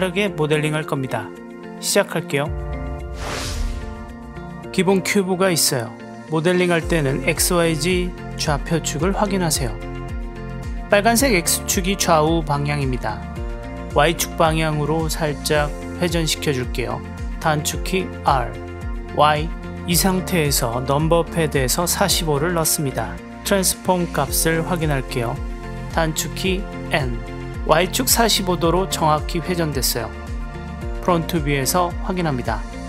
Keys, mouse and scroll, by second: 2.1 w, 2.3 click, 4.9 click, 5.0-5.4 middle drag, 5.4 drag, 5.6-6.0 middle drag, 6.0 click, 16.8 r, 19.5 y, 25.8 n, 28.7-29.7 middle drag, 29.7-30.2 drag, 30.2 middle click, 31.3 KP_1.